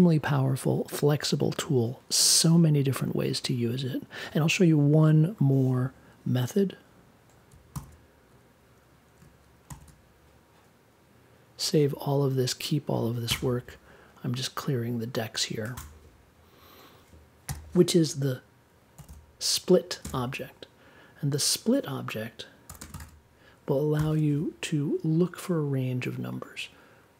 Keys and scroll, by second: 7.7 super+s, 9.6 shift+super+s, 13.2 BackSpace, 15.7 BackSpace, 17.4 n, 18.9 s, 20.0 space, 22.6 1, 22.8 space, 22.9 1, 23.9 super+j.